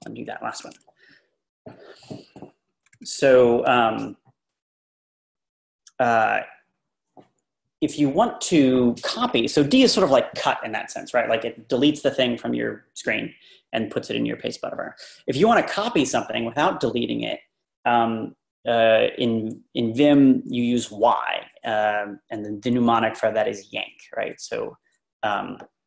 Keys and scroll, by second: 2.8 Page_Up.